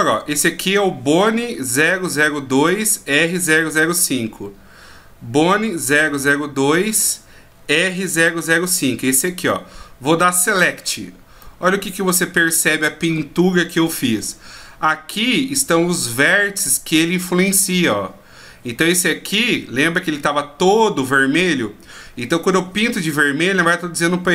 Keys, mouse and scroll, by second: 3.7-4.5 scroll down 7, 4.5-6.0 scroll up 1, 6.0-7.2 scroll up 1, 7.2-7.9 scroll down 4, 8.7 click, 10.6 click, 11.4 middle click.